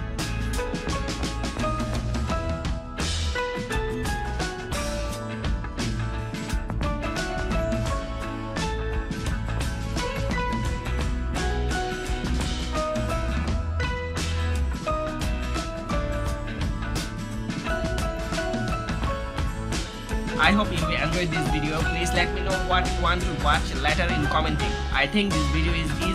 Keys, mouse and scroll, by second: 2.9 alt+super+scroll down 1, 4.2 alt+super+scroll up 1, 4.8 alt+super+scroll up 1, 8.5 alt+super+scroll down 1, 11.3 super+click.